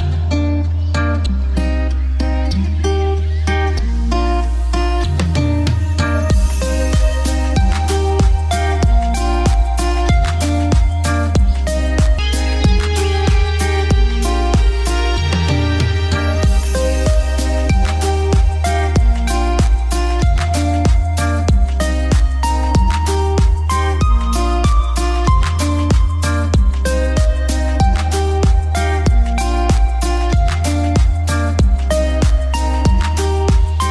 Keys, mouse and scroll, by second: 2.0 click, 2.8 F2, 3.1 click, 4.3 shift+Page_Up, 7.4 click, 12.3-12.9 typing, 13.2 Return, 14.4 click, 17.3 typing, 18.0 Return, 19.5 click, 20.7-21.6 typing, 22.7 click, 23.4 F3, 23.8 click, 24.1 ctrl+g, 24.4-26.6 drag, 26.6-28.2 drag, 28.6 F3, 32.1 click, 33.1 F2, 33.3 click.